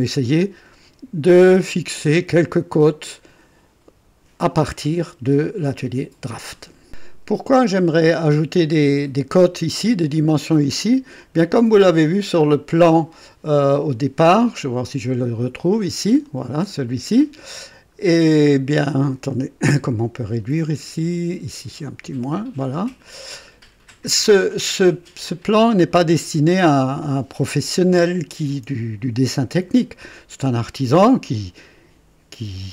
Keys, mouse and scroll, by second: 6.8 click, 11.8 click, 14.7 click, 16.0 click, 18.0 ctrl+scroll down 2, 21.8 ctrl+click, 22.8 ctrl+click.